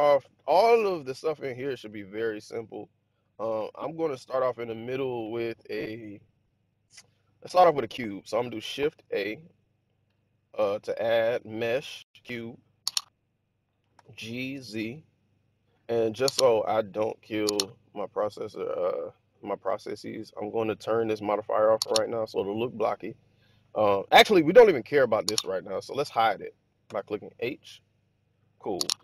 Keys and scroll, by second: 8.8 shift+a, 13.8 g, 14.4 z, 26.7 h.